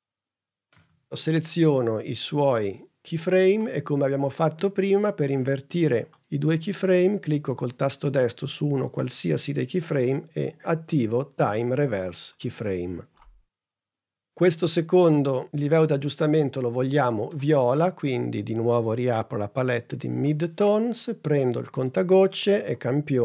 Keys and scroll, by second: 0.7 p.